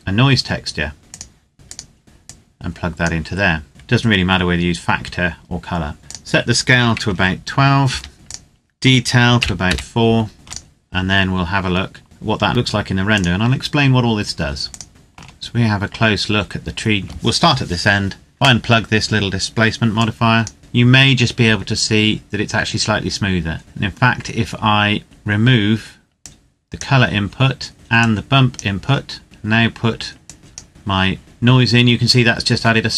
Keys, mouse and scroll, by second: 1.2 click, 2.0 scroll up 1, 2.3 click, 6.0 click, 6.8 KP_2, 7.7 KP_Enter, 8.1 click, 9.2 KP_4, 9.4 KP_Enter, 10.3 ctrl+click, 10.9-12.0 scroll down 1, 12.9 click, 14.9 shift+middle click, 15.5 scroll up 1, 19.8 click, 22.8-23.6 scroll down 1, 26.2 click, 30.2 click.